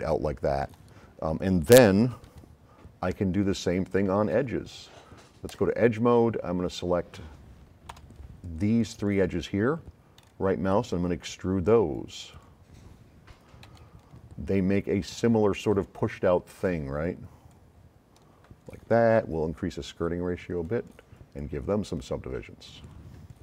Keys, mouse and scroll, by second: 0.5 click, 2.1 s, 2.2-4.4 right drag, 5.5 click, 8.0 F9, 8.4-9.2 drag, 10.2 right click, 12.3-12.7 drag, 13.7 s, 13.8-15.3 right drag, 15.5 right click, 16.2-16.5 scroll up 4, 17.5-18.7 drag, 19.6-21.0 drag, 21.4-22.4 drag, 22.6 click.